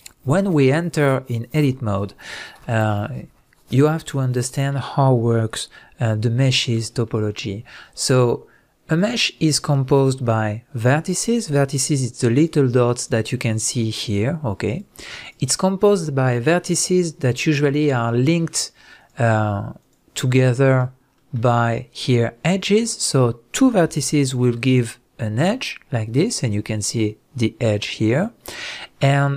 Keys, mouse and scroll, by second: 4.1-9.0 middle drag, 5.6-5.9 scroll up 1, 9.0 click, 9.9-12.3 middle drag, 12.3 click, 13.0 click, 13.5 click, 14.0 click, 14.7 click, 15.2 drag, 17.9 click, 19.0 click, 19.8 click, 20.7 click, 21.1-24.3 middle drag, 24.3 shift+click, 28.5-29.3 middle drag.